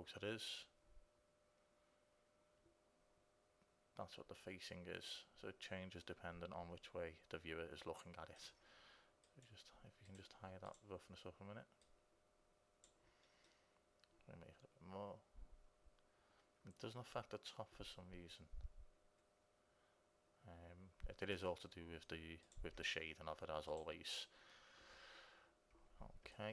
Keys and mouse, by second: 9.5-11.4 drag, 12.0-13.7 drag, 13.7-15.5 middle drag, 22.7-26.5 drag.